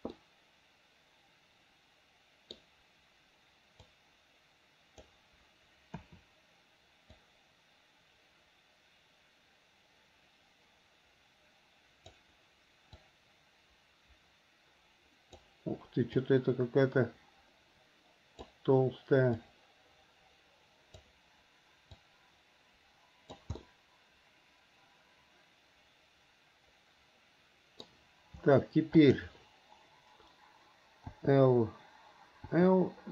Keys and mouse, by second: 0.4-2.8 middle drag, 4.0-5.2 drag, 6.1 KP_7, 7.2-12.2 drag, 13.1-15.5 drag, 16.4-18.7 drag, 19.5-21.2 drag, 22.2-23.5 drag, 23.7-28.0 middle drag, 29.1 click, 31.3 l, 32.7 l.